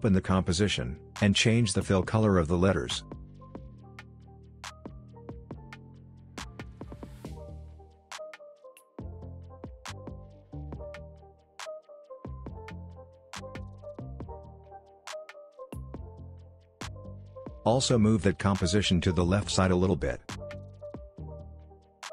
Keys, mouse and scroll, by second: 11.5-11.9 alt+scroll up 1, 12.6-14.8 drag, 15.3 alt+scroll up 1, 15.6 click, 16.7 ctrl+z, 17.2 p, 18.4-21.5 drag, 22.0 alt+scroll down 1.